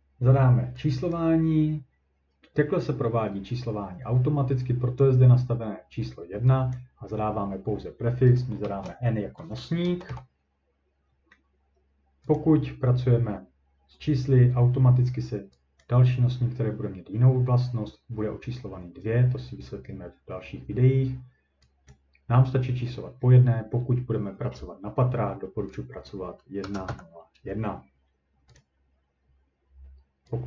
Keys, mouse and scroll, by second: 1.1 click, 5.0 click, 6.7 click, 8.6 n, 9.8 BackSpace, 10.1 n, 12.4 click, 15.8 click, 21.9 click, 25.8 click, 26.4-27.4 typing, 28.6 click.